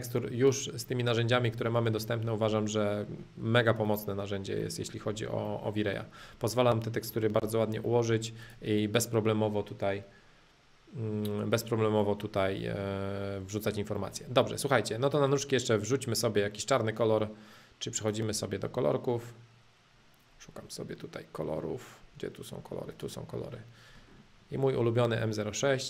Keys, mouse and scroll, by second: 0.0 click, 0.8 middle click, 1.5 click, 2.0 middle click, 2.4 click, 2.9 middle click, 3.8 click, 4.5-5.8 middle drag, 6.6-8.4 middle drag, 8.4 click, 8.8-10.8 middle drag, 12.0 middle click, 12.6-13.3 scroll down 2, 13.3-14.1 scroll down 1, 14.1-15.1 middle drag, 15.1-17.1 drag, 18.0-20.0 drag, 22.9-24.1 drag, 24.1-25.2 scroll down 2, 25.2-25.8 scroll down 1.